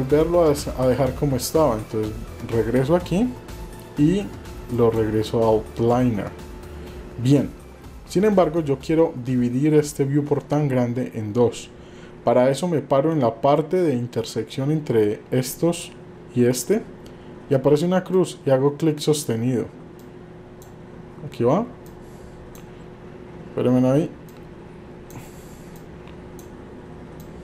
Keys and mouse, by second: 0.0-4.9 drag, 18.1-19.2 drag, 20.0 click, 21.9 click, 24.3 click, 25.8 click, 27.2 click.